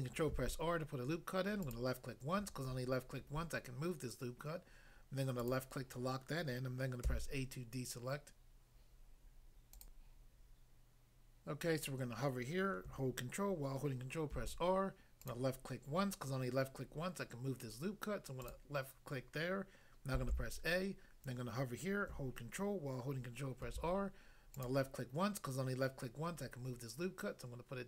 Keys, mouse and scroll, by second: 0.3 ctrl+r, 1.6 click, 1.7 click, 5.4 click, 5.5 click, 7.0 a, 9.8 click, 9.9 click, 14.3 ctrl+r, 15.3 click, 18.5 click, 20.3 a, 23.6 ctrl+r, 24.5 click.